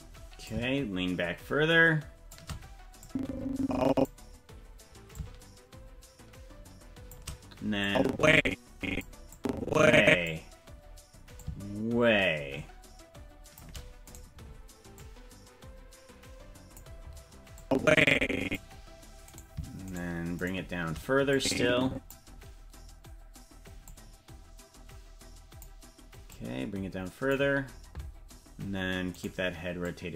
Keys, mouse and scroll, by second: 0.4-2.4 shift+drag, 3.0-4.1 drag, 5.1-7.2 drag, 7.8-9.0 drag, 9.3 click, 11.4-13.6 shift+drag, 14.2 right click, 14.9-16.8 drag, 17.6-18.6 drag, 19.4 right click, 20.5 shift+right click, 21.3 click, 23.8-25.7 drag, 26.3-27.3 drag, 29.2 right click, 29.8-30.1 drag.